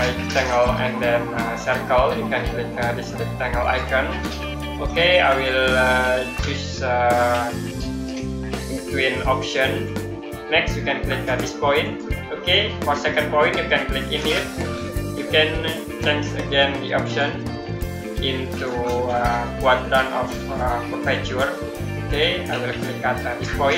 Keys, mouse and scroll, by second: 3.5 click, 6.1 click, 9.7 click, 16.9 click, 21.9 click.